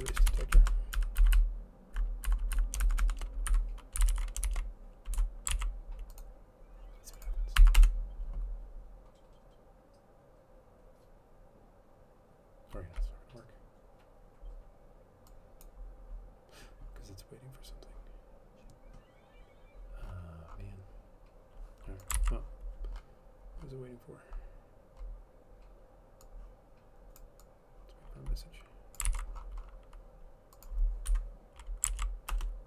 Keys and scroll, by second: 0.0-0.5 typing, 0.7 shift+Right, 1.2 End, 1.3 Left, 1.5-2.1 Left, 2.4 Left, 2.7 Left, 3.0 shift+Right, 3.2 shift+Right, 3.7 Delete, 3.9-5.2 typing, 5.3 Delete, 5.7 ctrl+s, 8.0 Up, 8.0 Return, 10.1-10.9 typing, 22.3 ctrl+c, 29.2 ctrl+c, 31.3 Delete, 32.1 ctrl+z, 32.5 Return.